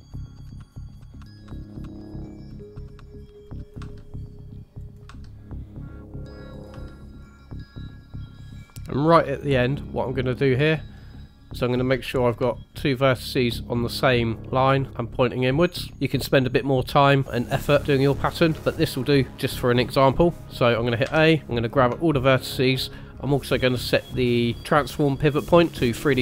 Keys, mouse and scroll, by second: 0.0-3.8 typing, 5.0 e, 6.7 e, 12.5 shift+middle click, 15.9 scroll down 1, 16.0 shift+middle click, 18.6 shift+middle click, 21.0 a, 22.0 shift+middle click, 23.9 click.